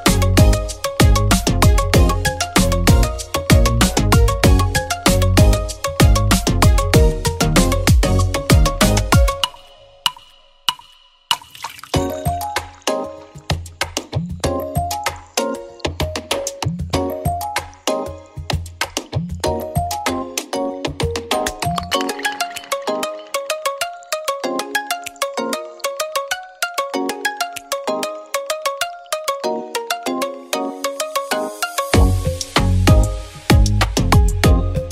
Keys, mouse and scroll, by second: 1.2-3.7 drag, 3.7 space, 3.9 scroll down 1, 5.8 click, 6.3 scroll up 1, 7.5 click, 8.4 ctrl+click, 9.0 space, 9.3-10.1 scroll up 1, 10.1 g, 11.3-24.3 drag, 11.3 typing, 24.3 space, 26.2 right click, 26.2 typing, 27.4 click, 28.3 shift+right click, 28.7-29.1 typing, 29.1-34.5 drag, 34.0-34.5 typing.